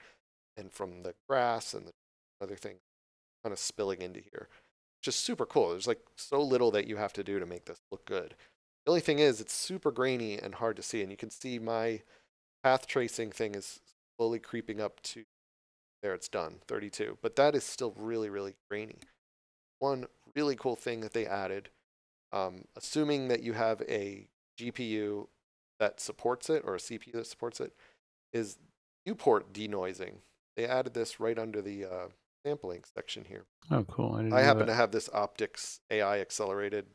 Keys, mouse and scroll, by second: 32.8 click.